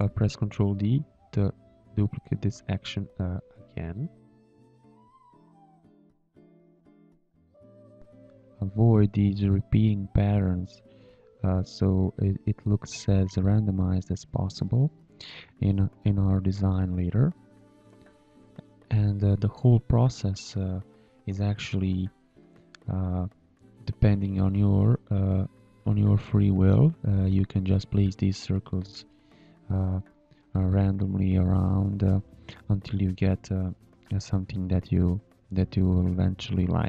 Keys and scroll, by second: 10.6 space, 11.2 shift+a, 14.9 space, 21.7 space, 25.8 space, 30.7 space.